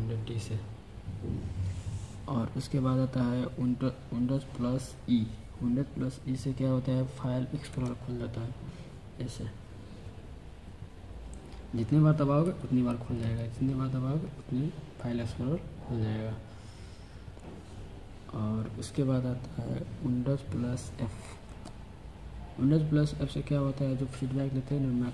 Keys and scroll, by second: 7.6 super+e, 12.3 super+e, 13.1 super+e, 21.3 super+f.